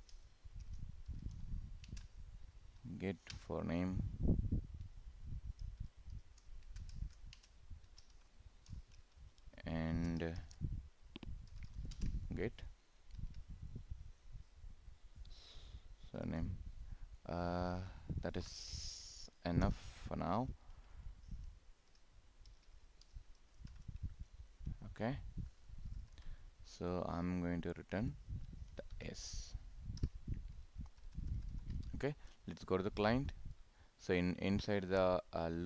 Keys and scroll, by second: 1.9 ctrl+space, 12.1 ctrl+space, 25.9 ctrl+s, 30.9 ctrl+s.